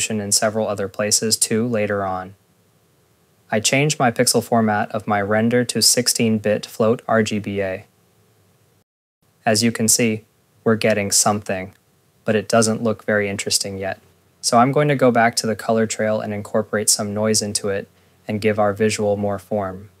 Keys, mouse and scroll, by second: 0.0 scroll, 0.4 click, 0.9 click, 2.1 click, 10.3 scroll, 10.8 click, 15.8 scroll, 15.8 click, 16.1 ctrl+a, 17.0 click, 18.1-18.5 scroll, 18.4 ctrl+s, 19.5 click, 19.7 click.